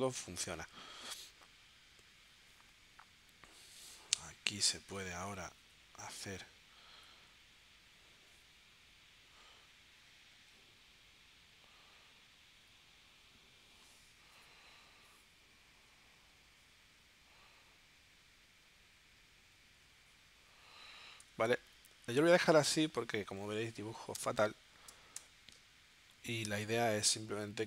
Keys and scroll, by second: 5.0 0, 7.0 0, 21.2 v, 23.4 z, 25.2 v.